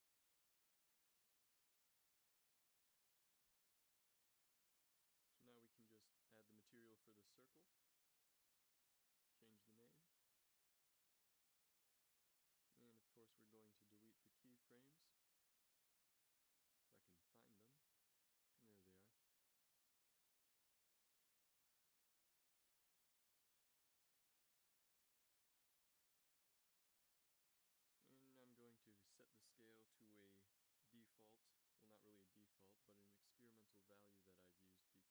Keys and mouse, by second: 1.9 click, 3.8-5.7 middle drag, 7.6 middle click, 19.4 a, 19.9 b, 22.3 x, 25.1-27.0 drag, 27.7-31.8 drag, 32.8 ctrl+c, 33.3 ctrl+v, 33.8 ctrl+v.